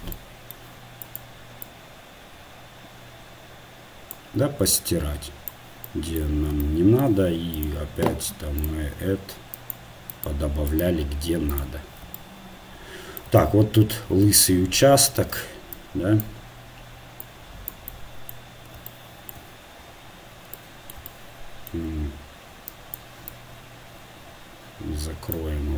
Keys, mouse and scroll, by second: 1.7-4.3 drag, 1.7 middle click, 5.6-25.5 drag.